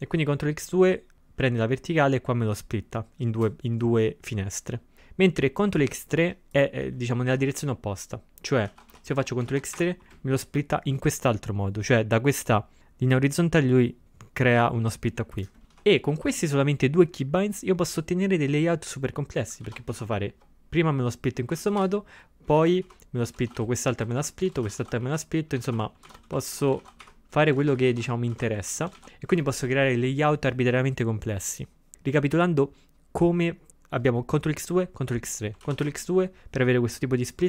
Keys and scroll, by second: 8.7 ctrl+x, 9.0 0, 9.5 ctrl+x, 9.8 3, 15.6 ctrl+x, 15.7 0, 19.7 ctrl+x, 20.0 2, 21.6 ctrl+x, 21.8 o, 22.6 ctrl+x, 22.9 3, 23.3 c, 31.7-32.4 typing, 35.7 ctrl+x, 35.9 2.